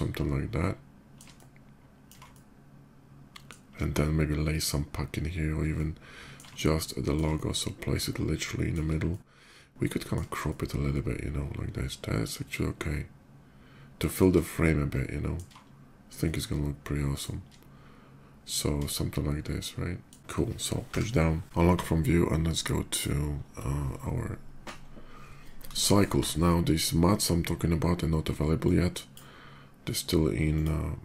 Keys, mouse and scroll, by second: 1.1 ctrl+middle click, 2.0-3.2 shift+middle drag, 5.5-6.1 shift+middle drag, 6.3 ctrl+middle click, 7.1-8.5 shift+middle drag, 8.8-9.9 ctrl+middle drag, 10.1-13.9 shift+middle drag, 14.7 ctrl+middle click, 16.0 shift+middle click, 19.3 shift+middle click, 20.6 Page_Down, 22.5 click, 28.2 click, 30.2 click.